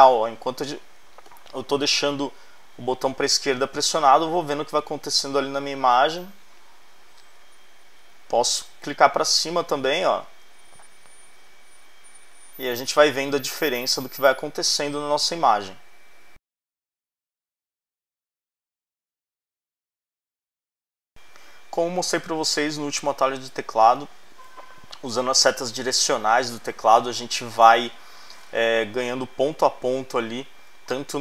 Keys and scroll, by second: 7.4 Right, 8.1 Up, 10.4 Up, 12.1 Up, 12.8 Down, 14.8 Down, 27.5 Right.